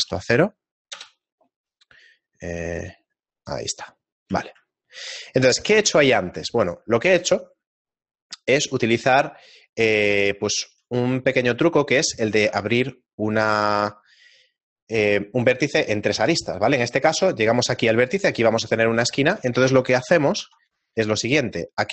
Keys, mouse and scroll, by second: 2.8 click, 4.0 middle click, 4.3 a, 4.8 shift+middle click, 6.2 scroll up 1, 9.2 shift+middle click, 12.1 shift+middle click, 12.1-12.8 scroll up 2, 13.0 ctrl+Tab, 13.4 right click, 18.0 right click, 18.9 shift+middle click.